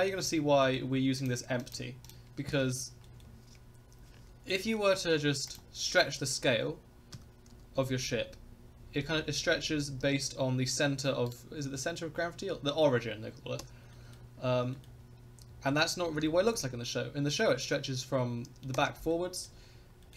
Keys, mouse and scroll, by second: 0.0-0.3 middle drag, 0.6 shift+middle drag, 0.9 scroll up 1, 1.2 click, 1.6 click, 2.0 click, 2.6 shift+scroll up 1, 2.6 shift+middle click, 3.0 middle click, 4.4 scroll down 2, 4.7 shift+middle click, 5.1 scroll up 1, 5.5 click, 7.1 s, 11.2-13.5 right drag, 13.5 Escape, 13.9 middle drag, 14.4 scroll up 1, 14.7 shift+middle drag, 15.4 scroll down 2, 15.7 s, 19.1-19.5 middle drag, 19.7 scroll up 1, 20.0 middle click.